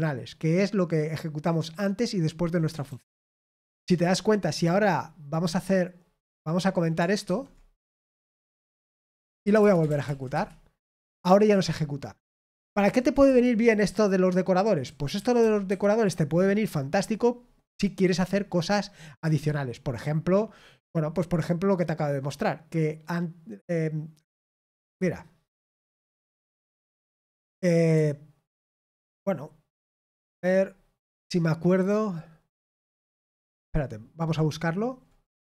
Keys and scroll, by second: 3.2 ctrl+p, 3.7 Return, 8.8-10.0 typing, 10.0 ctrl+p, 10.3 ctrl+Return, 12.8 ctrl+p, 13.2 Return, 13.8-15.6 typing, 25.6-26.6 typing.